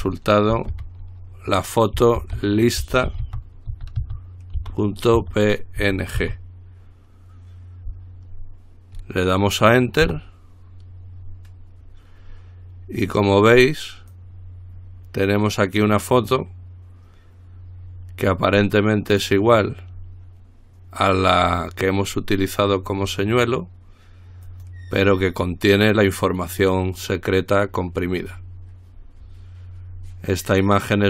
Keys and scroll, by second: 0.1-0.9 typing, 2.4-6.4 typing, 10.3 Return.